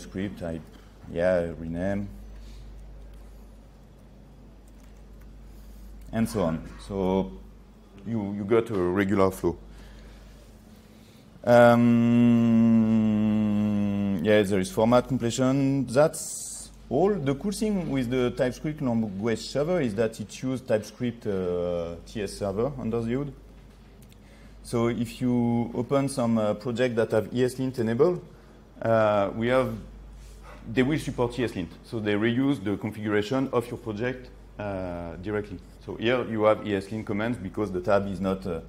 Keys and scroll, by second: 2.8 ctrl+3, 6.8 ctrl+z.